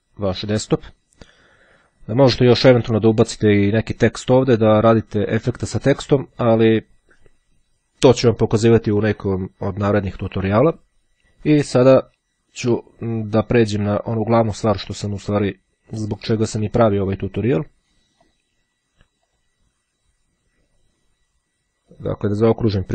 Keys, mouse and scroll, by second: 12.2-14.1 drag, 14.6-15.6 drag, 18.2 click, 19.4 click, 22.0 click.